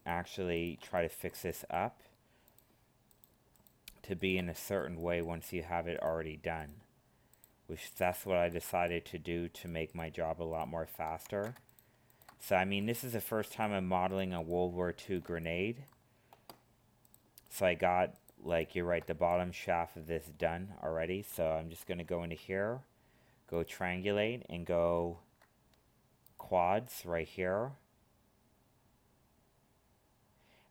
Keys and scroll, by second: 11.2 ctrl+z, 21.8 ctrl+f, 24.9 ctrl+f.